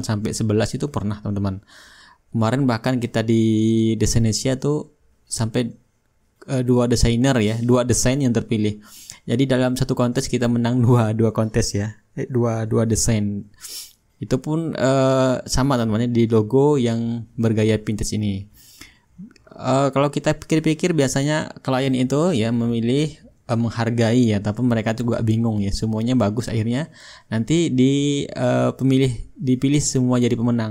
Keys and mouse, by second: 0.8-2.7 drag, 4.0-5.1 drag, 5.7-7.6 drag, 7.8-8.9 drag, 9.3-10.5 drag, 11.2-13.2 drag, 13.7-14.8 drag, 15.1-21.3 drag, 19.2-21.3 right drag, 23.2-24.3 shift+drag, 24.6-25.7 drag, 25.7-27.7 drag, 27.2 shift+right click, 27.7-30.7 shift+right drag, 28.4-30.7 shift+drag.